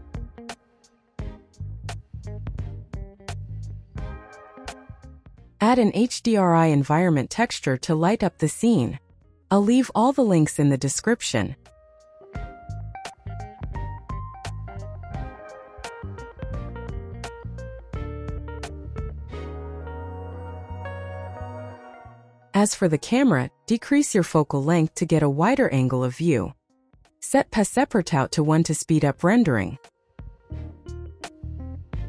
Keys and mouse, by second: 3.1 n, 4.7 click, 5.9-6.9 drag, 7.5 click, 12.7 click, 13.5 click, 15.8 click, 17.5 click, 18.9-20.0 right drag, 20.0 click, 21.0 click, 24.2-25.4 drag, 27.1 click, 27.4 click, 28.4 click.